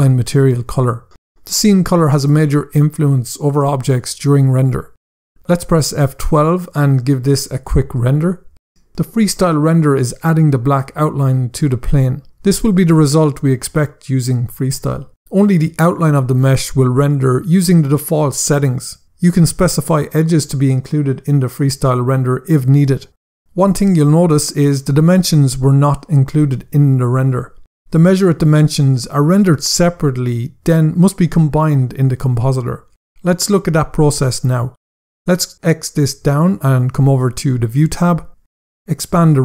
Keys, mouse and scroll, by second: 6.4 F12, 35.6 click, 37.1 click, 37.6 scroll down 1, 39.3 click.